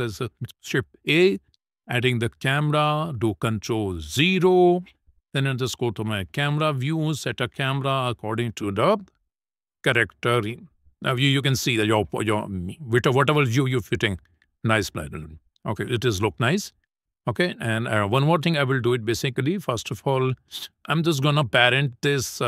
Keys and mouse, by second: 2.0 shift+a, 5.6 click, 6.9 shift+middle click, 7.8 click, 8.0 middle click, 8.8 ctrl+middle click, 9.3 shift+middle click, 9.8 middle click, 11.4 shift+middle click, 12.1 shift+middle click, 13.6 ctrl+middle click, 14.1 shift+middle click, 14.5 middle click, 15.5 shift+middle click, 19.2 click, 20.7 KP_0, 21.6 middle click, 22.0 middle click.